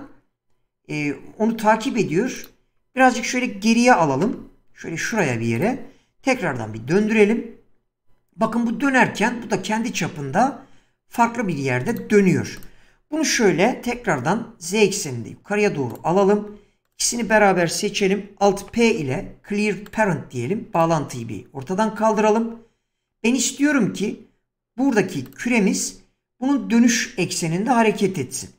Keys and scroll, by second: 3.9 g, 6.6 r, 13.4 g, 13.9 z, 18.7 alt+p.